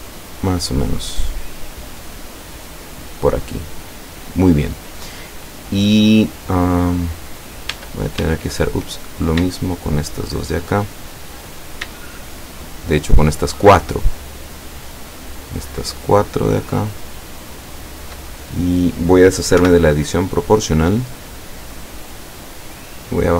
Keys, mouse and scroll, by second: 0.0 scroll down 2, 1.8 scroll down 2, 7.8 Tab, 9.1 right click, 9.7 shift+right click, 11.1-11.5 shift+scroll up 1, 12.4 shift+right click, 13.2 shift+right click, 13.9 shift+right click, 14.4-15.4 shift+middle drag, 16.1 shift+right click, 16.7 shift+right click, 17.2 shift+right click, 17.7 shift+right click, 18.4-18.9 shift+scroll down 1, 19.6 o, 22.7-23.3 drag.